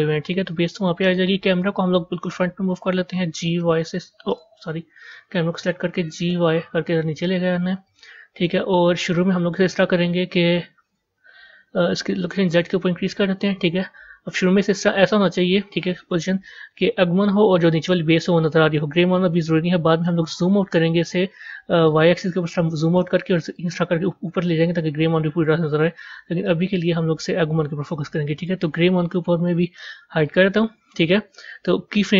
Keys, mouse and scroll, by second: 3.2 g, 4.9 click, 6.0 g, 8.3 KP_0, 12.1-15.1 drag, 21.7-26.1 drag, 26.1 ctrl+z, 26.4 ctrl+z, 28.2 click, 30.1 click.